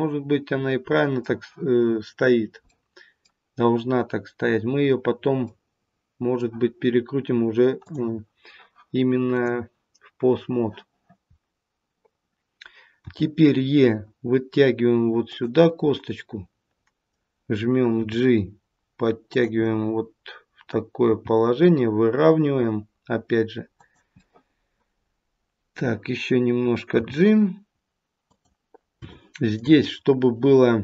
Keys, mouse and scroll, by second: 2.7 middle click, 5.4 middle click, 7.7 click, 9.2 click, 13.0 e, 15.6 middle click, 17.9 g, 19.6 middle click, 21.0 g, 24.1 middle click, 27.0 g, 29.0 shift+middle click, 29.8 scroll up 1.